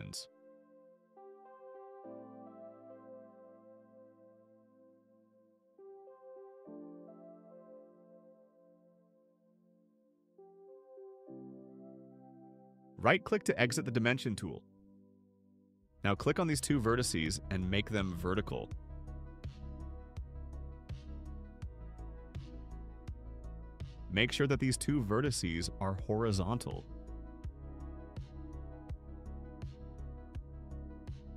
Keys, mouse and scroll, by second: 2.4 click, 3.5 click, 4.8 2, 5.2 Return, 8.3 click, 9.3 click, 10.0 click, 11.1 2, 11.6 Return, 14.3 right click, 16.3 click, 17.1 click, 20.8 click, 24.5 click, 25.7 click, 30.0 click.